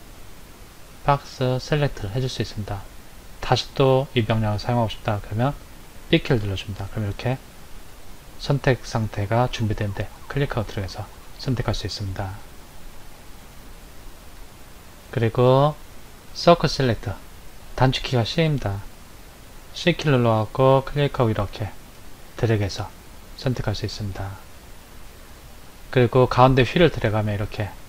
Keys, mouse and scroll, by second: 5.1 click, 6.3 b, 12.6 click, 15.1 click, 19.8 c.